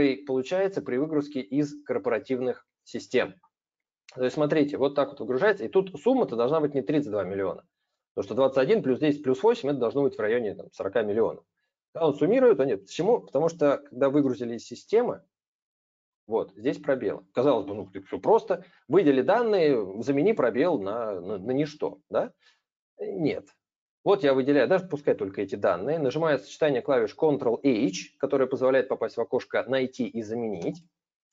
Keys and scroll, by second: 30.3 ctrl+h.